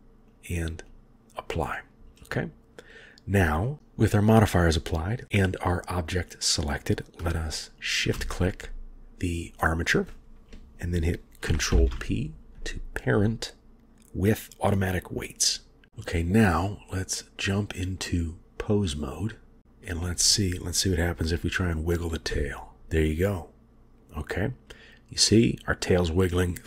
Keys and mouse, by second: 0.3-1.1 drag, 11.8 ctrl+p, 17.2-18.6 drag, 22.4 g.